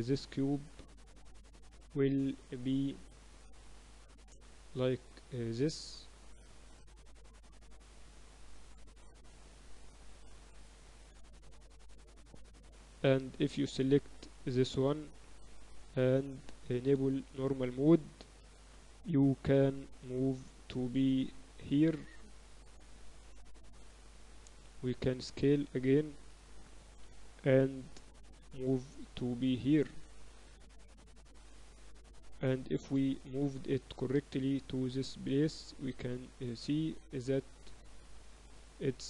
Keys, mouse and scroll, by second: 0.2 a, 0.4 a, 0.7 s, 2.9 Tab, 3.3-5.3 drag, 7.1-8.9 drag, 9.3 r, 11.1 Tab, 11.3 a, 11.6 a, 11.9 a, 12.4 c, 14.9-21.6 drag, 23.9 a, 24.0 a, 24.4 s, 26.3 a, 27.1 c, 28.4-29.7 drag, 29.5 z, 29.9 Tab, 30.5 Tab, 30.8 Tab, 31.5 KP_7, 32.0 z, 33.4-35.7 drag, 36.1-38.7 drag.